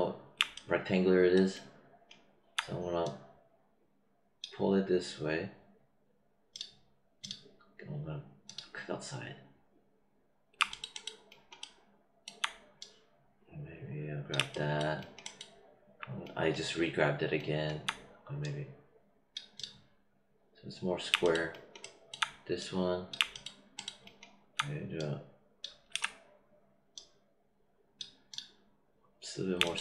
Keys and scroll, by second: 25.8 z.